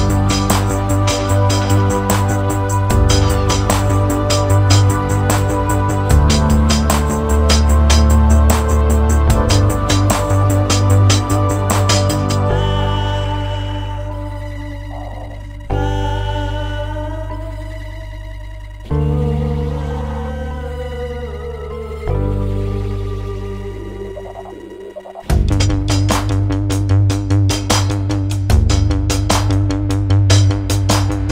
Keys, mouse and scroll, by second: 7.1-7.9 scroll up 1, 7.9-8.6 scroll up 1, 8.6 middle click, 19.4 middle click, 21.9 middle click, 23.8 middle click, 27.5 middle click.